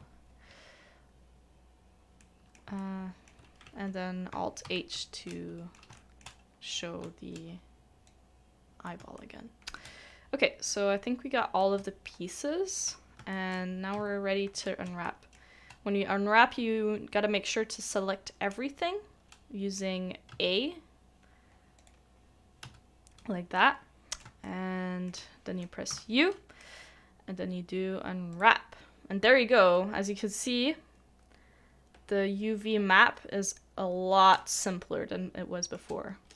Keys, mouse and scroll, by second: 2.2 shift+middle click, 2.8 shift+middle click, 4.6 alt+h, 5.2 middle click, 5.9 shift+middle click, 6.3 scroll down 1, 6.4-6.7 scroll up 1, 7.1-7.5 shift+scroll, 7.5-8.6 shift+scroll down 1, 9.1 shift+middle click, 11.8 shift+middle click, 13.3 shift+middle click, 14.8 a, 15.0 shift+middle click, 23.5 typing, 23.5 middle click, 24.4 shift+middle click, 34.3 u, 34.4 shift+middle click.